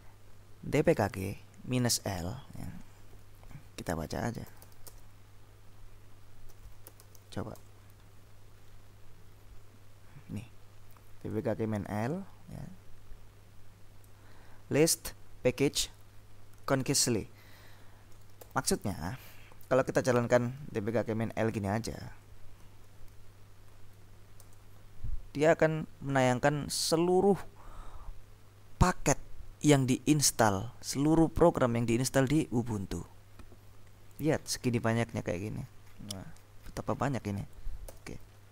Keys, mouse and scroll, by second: 1.0 click, 2.2 click, 4.2-5.3 typing, 6.3-7.9 typing, 8.6-9.9 scroll up 3, 11.4-14.6 drag, 18.5 ctrl+l, 19.0 ctrl+Up, 20.7 ctrl+w, 21.1 ctrl+q, 23.2 ctrl+w, 24.4 Return, 34.0-36.8 scroll up 2, 38.0 ctrl+l.